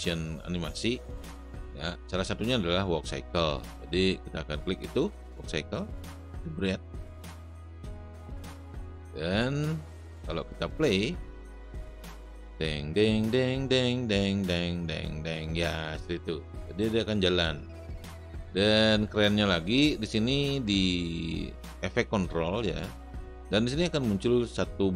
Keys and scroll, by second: 11.7 space, 16.4 space.